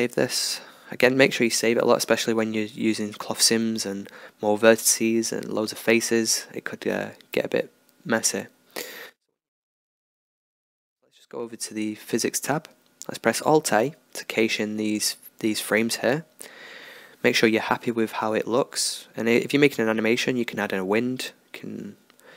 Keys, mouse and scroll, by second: 0.3 ctrl+s, 5.5-7.4 drag, 7.4-8.8 middle drag, 8.8-12.0 drag, 11.9 alt+a, 21.3-22.3 drag.